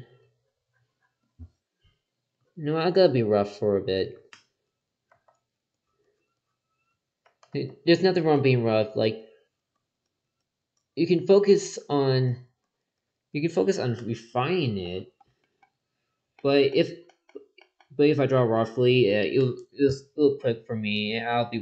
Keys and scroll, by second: 5.1 ctrl+z, 7.2 ctrl+z.